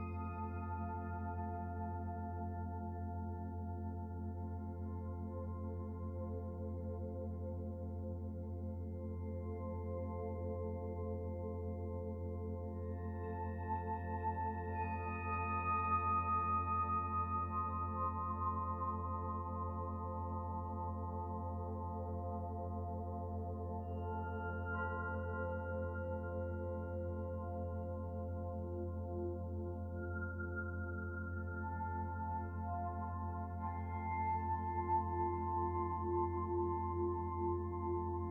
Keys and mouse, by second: 8.8 click, 17.5-26.3 middle drag, 27.4-29.3 middle drag, 29.7-30.2 middle drag, 32.1-32.5 shift+middle drag, 33.1-33.6 middle drag.